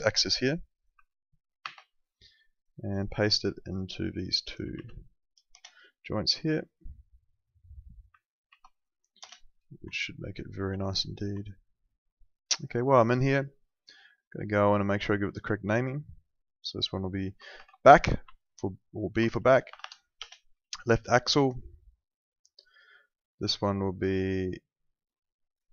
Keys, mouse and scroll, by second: 1.6 ctrl+c, 2.5 click, 4.7 ctrl+v, 5.5 Return, 5.5 KP_Enter, 6.5 click, 8.5 ctrl+v, 9.1 Return, 9.9 alt+middle click, 11.5 alt+middle click, 13.3 click, 17.5 shift+b, 18.2 Right, 19.6 BackSpace, 20.1 Return, 22.5 click.